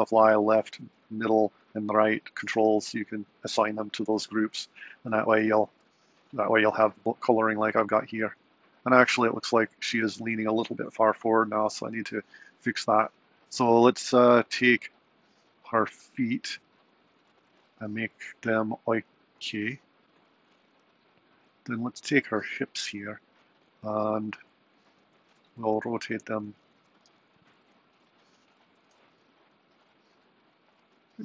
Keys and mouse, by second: 5.9 super+Right, 12.6 click, 20.8 click, 22.7 click, 25.1 super+Right, 25.9 r, 29.0 r.